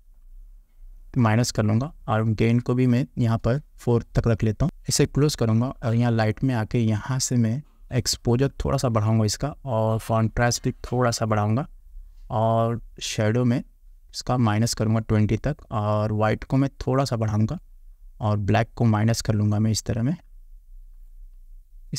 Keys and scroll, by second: 4.2 4.